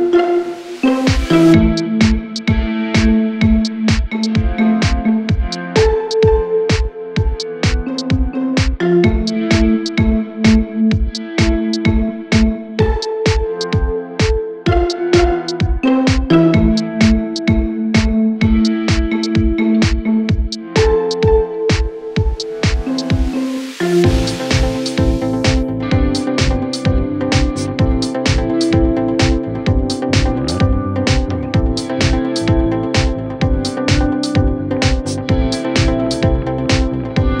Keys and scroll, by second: 0.9 Right, 10.4 shift+F2, 10.8 Escape, 12.1 F2, 12.6 Escape, 17.7 F3, 18.1 Escape, 27.1 shift+Page_Down, 27.3 ctrl+Page_Up, 28.6 F3, 28.9 Escape, 29.5 shift+F2, 29.8 Escape, 34.5-37.4 typing, 35.6 Caps_Lock.